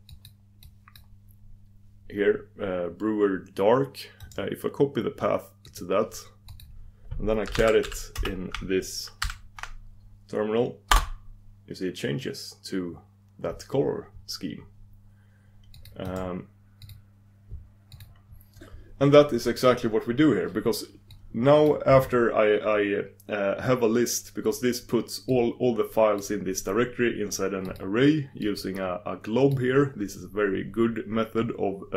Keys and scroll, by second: 1.1 super+d, 6.5 super+d, 16.0 super+d.